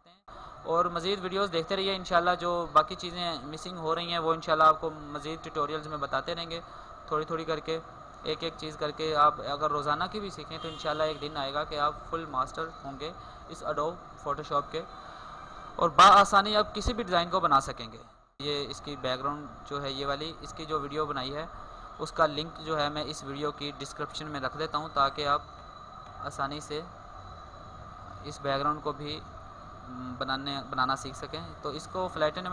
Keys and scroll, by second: 0.0 ctrl+space.